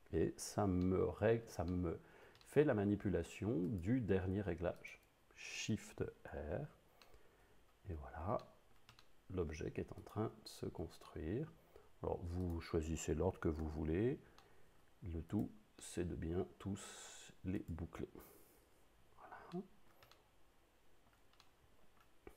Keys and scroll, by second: 6.4 shift+r, 13.7 shift+r, 18.6 shift+r.